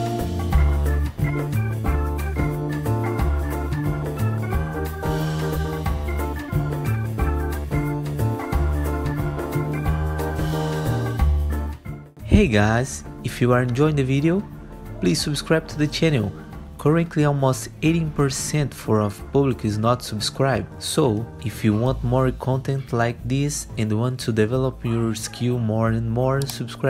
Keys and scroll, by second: 1.5 alt+x, 6.6 w, 17.8 ctrl+t, 18.2 2, 20.1 2, 22.5 2.